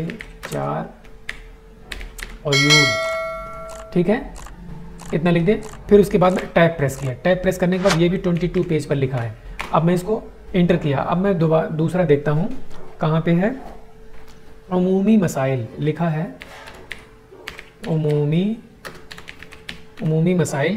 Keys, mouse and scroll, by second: 0.0-2.4 typing, 6.3 Tab, 8.3 typing, 9.4 Return, 16.0-19.9 typing.